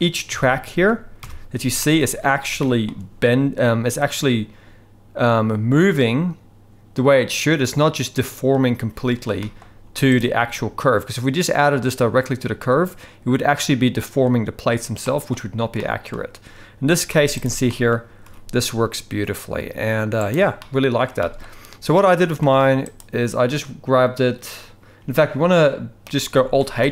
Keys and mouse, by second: 0.3 KP_3, 1.2 KP_1, 1.8 shift+middle click, 2.6-2.9 shift+middle drag, 9.4 shift+middle drag, 9.8 z, 15.0 shift+middle click, 15.8-16.1 shift+middle drag, 17.1 z, 17.7 shift+middle drag, 18.2 g, 20.6-21.0 middle drag, 21.2 shift+middle drag, 22.0-22.4 middle drag, 26.8 alt+h.